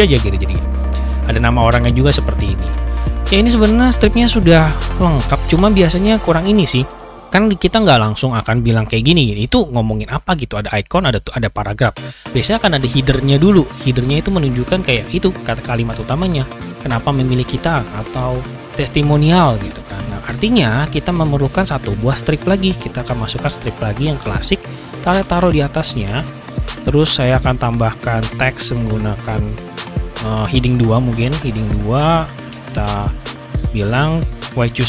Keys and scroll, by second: 34.7-34.8 typing.